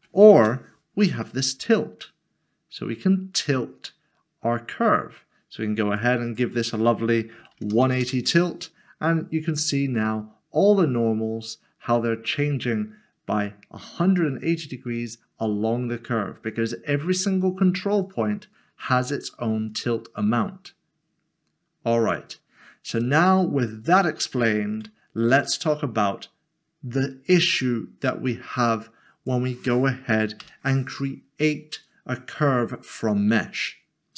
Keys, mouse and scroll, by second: 0.0 typing, 0.4 Return, 2.0 click, 6.3 click, 7.4 typing, 8.0 Return, 9.9 click, 10.2 middle click, 16.5 middle click, 16.7-17.4 scroll down 1, 18.0 click, 23.9 middle click, 24.7 Tab, 25.5 click, 28.7 click, 30.4 Delete, 34.0 click.